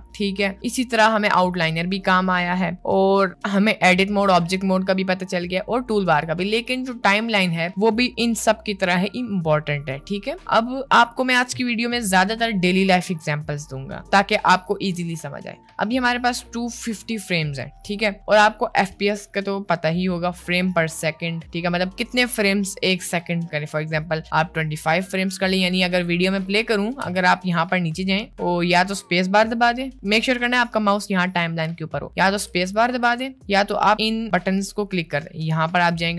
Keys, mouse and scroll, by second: 24.3-26.5 drag, 26.7 space, 27.1 space, 27.3 click, 32.2 space, 33.0 space.